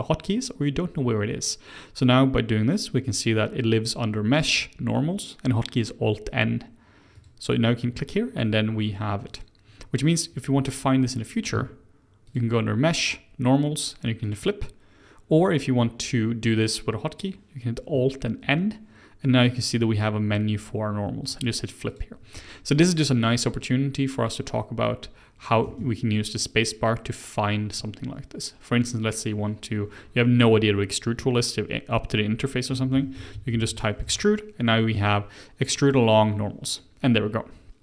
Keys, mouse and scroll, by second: 9.2 click, 11.5 a, 12.2-15.2 drag, 18.2 alt+n, 21.8 click, 25.6 space.